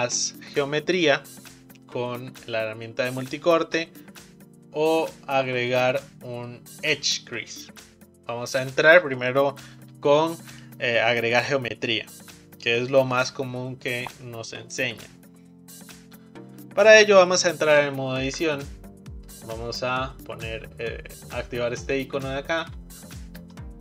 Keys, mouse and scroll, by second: 18.2 Tab, 22.0 click, 23.3-23.6 scroll up 2, 23.6-23.8 shift+middle drag.